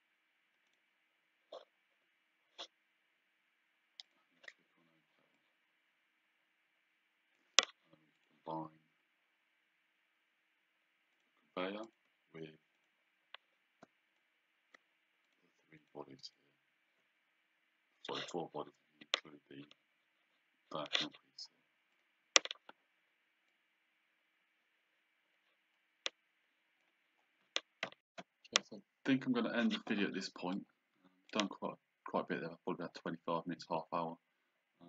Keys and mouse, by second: 0.7 click, 4.1 click, 5.4 click, 8.2 click, 11.2 click, 12.8 shift+click, 14.3 click.